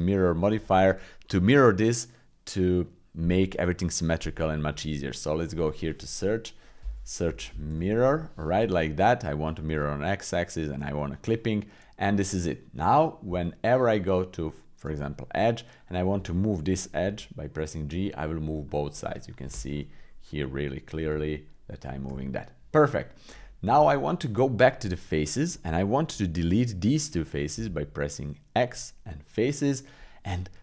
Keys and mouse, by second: 0.7-8.0 drag, 11.7 middle click, 12.4 middle click, 13.2 Tab, 15.8 click, 17.0 g, 19.7 middle click, 20.5 middle click, 21.0 g, 22.3 click, 23.1 middle click, 23.7 Tab, 25.2 click, 25.7 shift+click, 27.1 middle click, 27.5 x, 29.1 middle click.